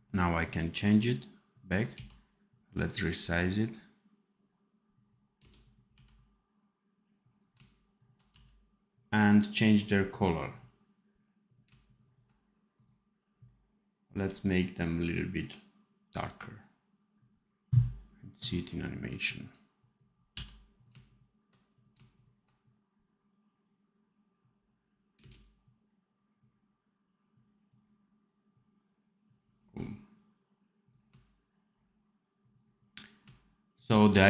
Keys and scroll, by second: 1.8 x, 5.3 space, 5.8 x, 8.2 v, 20.2 v, 25.1 space.